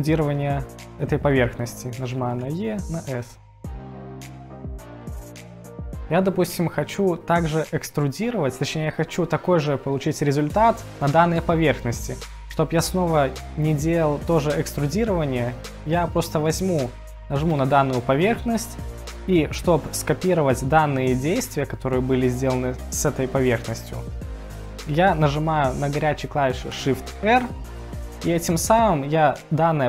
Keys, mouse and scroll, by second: 17.5 click, 27.2 shift+r.